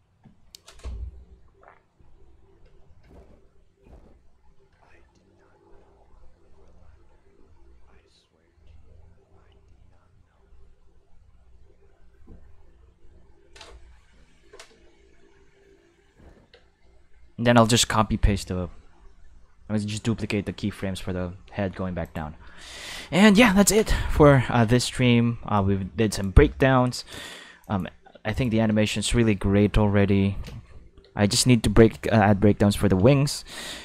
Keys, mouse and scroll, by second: 16.5 space, 22.0 click, 22.9 shift+middle click, 23.5 ctrl+s, 23.8 shift+middle click, 24.4 ctrl+s, 25.5 click, 26.5 shift+middle click, 27.2 ctrl+Tab, 27.6 click, 28.3 click, 28.5 space, 29.1 space, 30.5 space, 31.0 space, 31.9 shift+middle click, 33.2 shift+middle click.